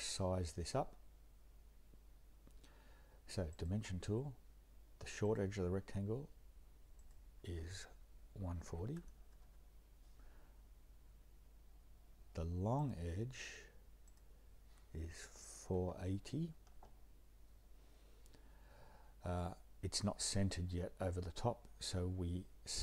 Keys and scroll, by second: 8.2-9.5 typing, 15.4-16.1 typing, 16.7 Return.